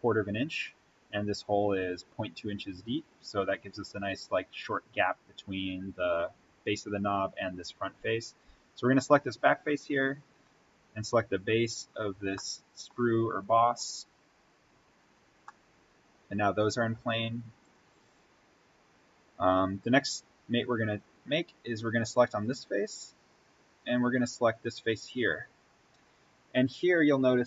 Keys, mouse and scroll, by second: 1.5 scroll up 1, 4.5 click, 5.3-7.2 scroll up 1, 9.9-10.5 scroll down 1, 12.3 middle click, 13.4 click, 14.3 scroll up 1, 15.4-17.6 middle drag, 17.6 click, 18.6-19.1 scroll down 1, 22.0 click.